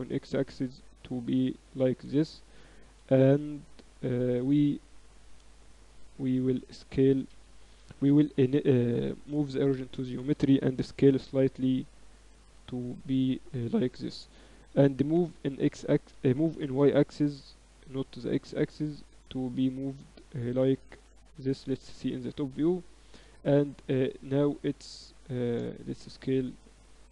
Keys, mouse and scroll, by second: 1.9 a, 2.0 a, 2.9 ctrl+n, 3.4 Tab, 5.1 s, 7.9 ctrl+alt+shift+c, 10.6 s, 14.9 g, 16.5 g, 21.2 KP_7, 22.1 z, 23.9 click, 24.4 click, 24.7-26.0 drag, 25.2 s.